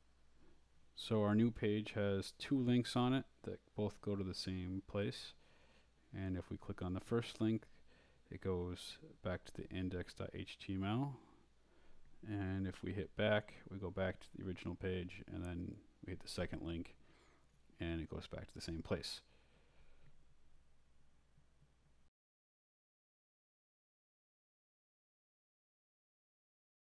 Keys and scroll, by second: 8.7 BackSpace, 9.0 Return, 11.2-15.8 typing, 16.1 Right, 16.4 Return, 25.0-26.9 typing.